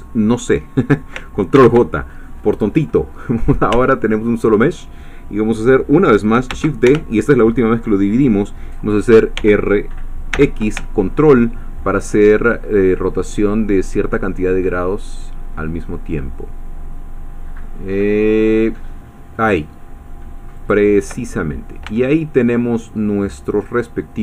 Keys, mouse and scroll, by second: 1.5 ctrl+j, 3.7 Tab, 6.8 shift+Escape, 9.3 r, 10.5 x, 20.6 ctrl+click, 21.3-21.9 ctrl+scroll down 3, 21.9 Tab, 23.0-23.5 scroll up 2, 23.8 scroll down 2.